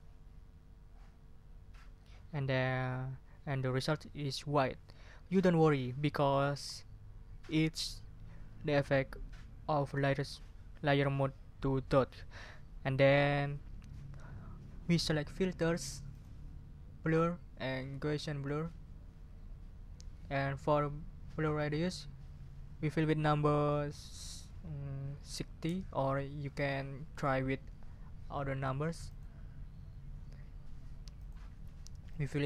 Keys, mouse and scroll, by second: 16.1 click, 18.4 click, 21.6 click, 25.2 6, 25.6 0, 26.5 click, 29.0 click, 31.2 click, 32.1 click.